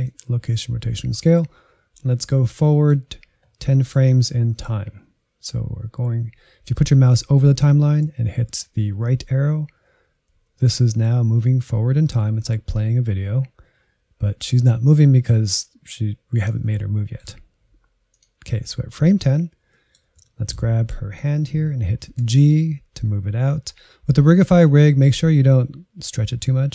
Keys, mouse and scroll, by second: 2.2-3.2 scroll up 4, 3.2-3.7 scroll up 2, 3.7 middle click, 4.1-4.4 scroll up 4, 4.4 middle click, 4.9-8.0 scroll up 1, 8.8 Right, 9.4 Right, 9.8 Right, 10.2 Right, 10.6 Right, 11.1 Right, 11.6 Right, 12.0 Right, 12.4 Right, 12.8 Right, 16.6-18.1 middle drag, 18.1-19.2 drag, 19.3-19.7 scroll down 1, 19.7-22.5 middle drag, 22.5 g.